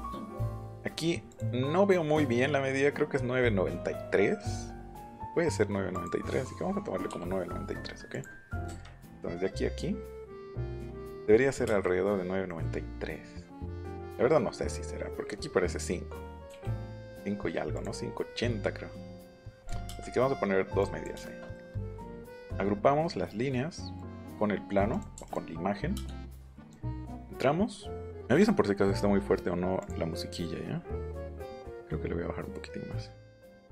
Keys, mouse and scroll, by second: 4.7 click, 5.9 click, 8.1 click, 8.6 Up, 10.8 click, 16.5 l, 17.7 click, 19.6 click, 19.8 middle click, 19.8 space, 20.8 click, 22.1 right click, 23.9 click, 24.9 click, 25.2 click, 25.2 m, 25.9 space, 26.4 click, 26.9 scroll up 1, 29.8 click, 31.3-33.7 drag.